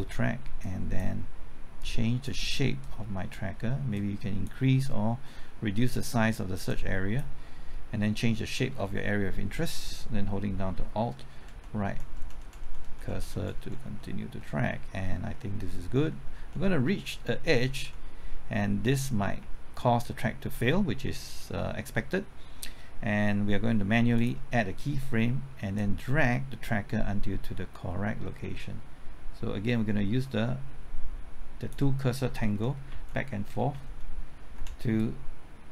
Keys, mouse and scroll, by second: 10.8 typing, 11.4 alt+Right, 11.8-12.6 typing, 12.4 alt+Right, 24.1-32.2 drag, 32.9-34.5 typing, 34.9-35.7 drag.